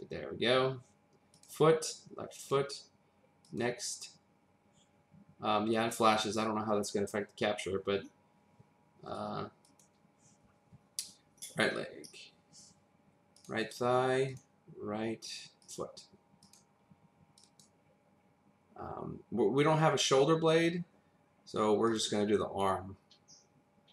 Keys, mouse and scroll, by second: 1.3 click, 2.7 click, 3.4 click, 9.7 click, 13.3 click, 15.7 click, 16.4 click, 21.9 click.